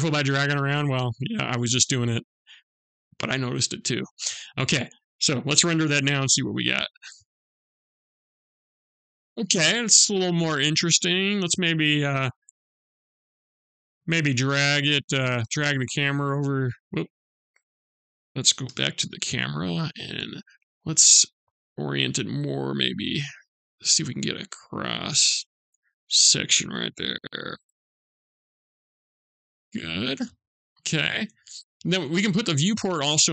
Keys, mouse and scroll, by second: 0.4 shift+scroll down 1, 0.5 shift+middle click, 0.5-1.2 shift+scroll up 1, 1.2 shift+scroll down 1, 2.5 click, 11.3 click, 13.6 shift+middle click, 15.2 middle click, 16.5 scroll up 1, 16.7 ctrl+z, 18.3 KP_0, 19.3 click, 20.5 shift+middle click, 21.6 middle click, 30.8 click, 33.1 click.